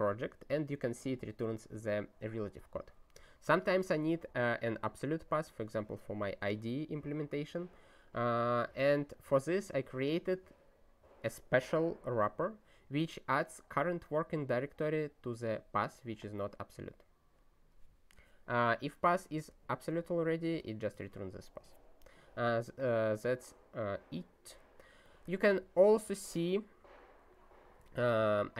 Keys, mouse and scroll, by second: 8.2 click, 8.7 ctrl+e, 13.4 click, 13.9 click, 15.0 click, 18.6 click, 19.2 ctrl+a, 19.3 ctrl+space, 19.4 ctrl+n, 19.9 ctrl+g, 20.4 ctrl+space, 20.5 ctrl+n, 20.9 ctrl+g, 25.0 click, 25.6 ctrl+n, 26.0 ctrl+e, 27.8 ctrl+e.